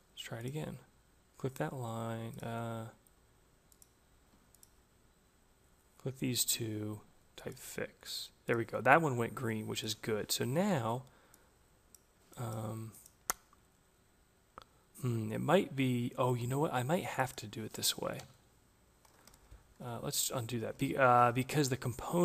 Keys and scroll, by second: 17.6 Return, 19.2 ctrl+z.